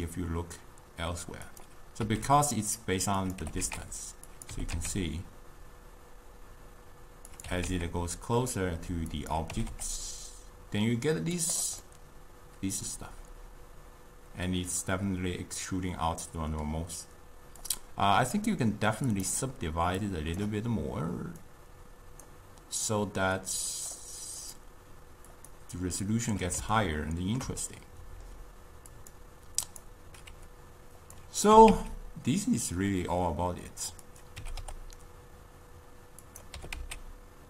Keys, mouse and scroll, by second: 2.1 s, 3.5 g, 4.6 g, 7.5 g, 9.6 g, 11.9-15.0 middle drag, 17.7 click, 19.2 click, 20.0-26.8 drag, 26.8-29.0 ctrl+middle drag, 29.0-31.2 drag, 31.6 g, 34.7 g, 36.9 g.